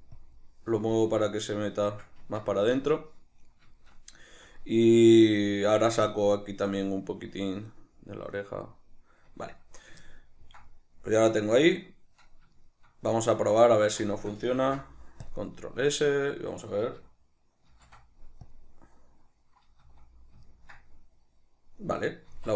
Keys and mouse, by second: 1.7-10.2 middle drag, 2.4 Tab, 12.7 shift+right click, 13.4 ctrl+middle click, 14.3 shift+middle click, 14.7 ctrl+s, 17.9 ctrl+shift+b, 19.9 z, 20.6 ctrl+middle click.